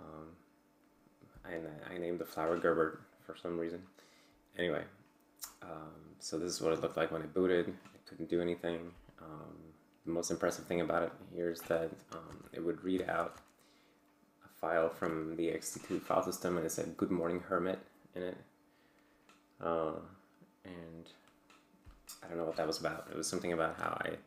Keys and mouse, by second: 11.1 click, 13.1 ctrl+alt+g.